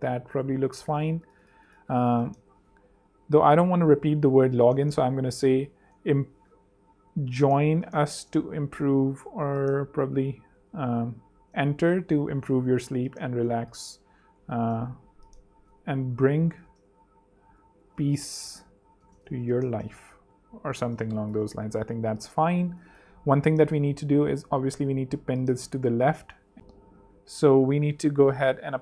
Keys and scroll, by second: 0.2 super+2, 0.8 super+z, 2.3 shift+super+Left, 5.6-8.5 typing, 10.4 shift+super+Left, 11.2-12.3 typing, 12.6 alt+z, 13.1 alt+super+z, 14.2 super+Right, 14.5 space, 15.8 alt+BackSpace, 15.9-21.0 typing, 21.8 super+space, 28.0 super+z.